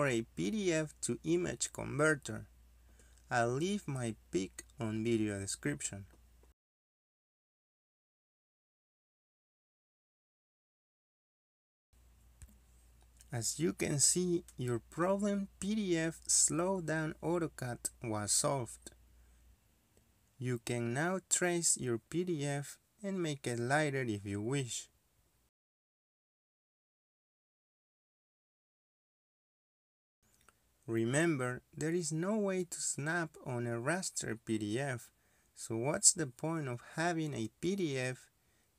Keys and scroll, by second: 1.5 space, 1.8 space, 4.5 Return, 12.6 Return, 19.8-21.8 typing, 20.7 Escape, 26.0 Escape, 27.7-28.4 typing, 29.7-30.4 typing, 30.6 Escape, 32.3-33.4 typing, 37.6 Escape.